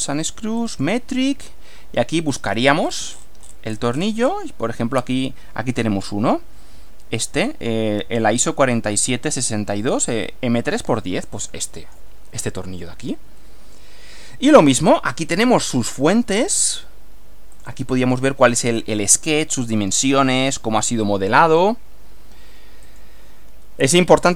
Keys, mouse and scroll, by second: 0.6 click, 2.2-2.7 scroll down 1, 2.8 scroll down 1, 3.1 scroll up 1, 11.3 click, 15.5-16.7 middle drag, 17.5 click, 18.6 scroll down 1, 22.9 click.